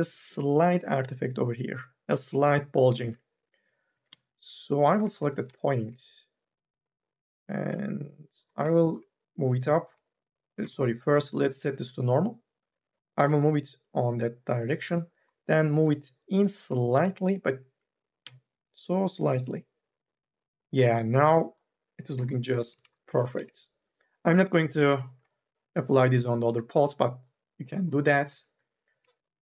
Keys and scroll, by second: 3.5 q, 3.7 1, 3.9 e, 4.9 1, 10.8 ctrl+z, 18.0 q, 22.9 ctrl+z, 22.9 q, 28.3 2.